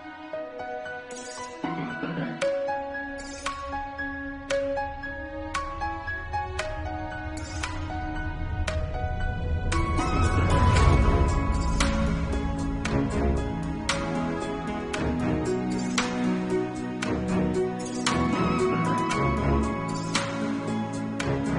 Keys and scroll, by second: 0.0 ctrl+s, 0.4 ctrl+s, 0.8 ctrl+s, 1.7 [, 4.6 ], 6.7 [, 11.3 ], 11.7 [, 14.3 ], 16.4 [, 17.8 ctrl+alt+z, 18.0 ctrl+s, 18.9 ctrl+s, 19.8 ctrl+s, 20.6 ].